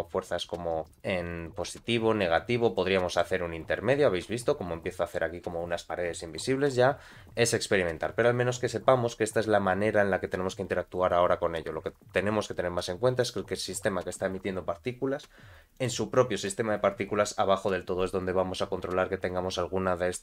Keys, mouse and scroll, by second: 2.8 middle click, 3.6-3.9 scroll down 2, 3.9-5.2 middle drag, 13.2 click, 15.8 click, 16.7-17.5 scroll down 2, 17.5-18.6 scroll down 9.